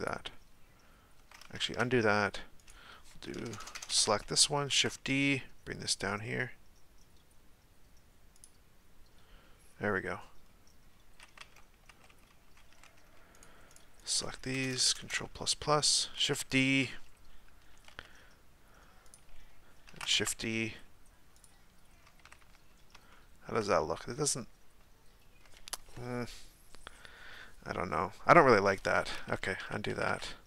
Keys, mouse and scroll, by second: 1.6 ctrl+z, 2.6 right click, 3.4-3.9 ctrl+KP_Add, 4.7 shift+d, 10.2-11.4 scroll down 2, 11.4 Tab, 11.9 Tab, 13.3 shift+right click, 13.7 shift+right click, 14.5-15.0 ctrl+KP_Add, 16.2 shift+d, 19.9 shift+d, 22.2 a, 22.4 a, 23.1-26.9 shift+middle drag, 29.3 ctrl+z, 29.6 ctrl+z, 29.9 ctrl+z, 30.0 ctrl+z.